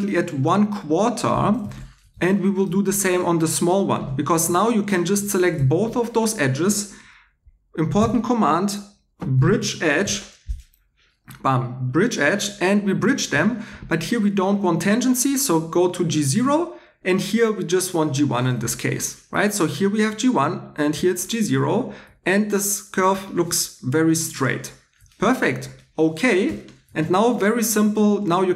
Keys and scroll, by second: 2.1 2, 4.3 2, 8.0 f, 9.1-10.5 typing, 27.0 2.